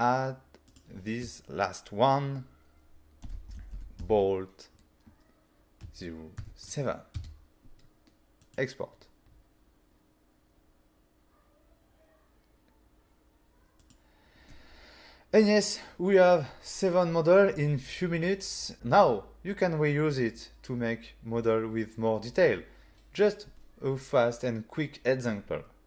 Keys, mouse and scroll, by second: 0.7 click, 3.3-4.1 typing, 5.9 0, 6.5 7, 7.2 Return, 8.5 click, 13.9 click.